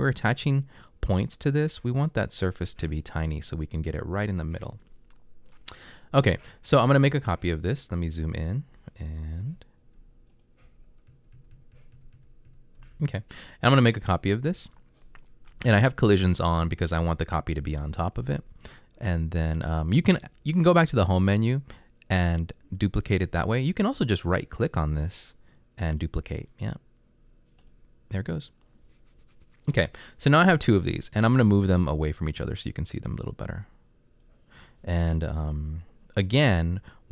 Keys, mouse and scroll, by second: 9.5-13.1 typing, 28.5-32.5 right drag.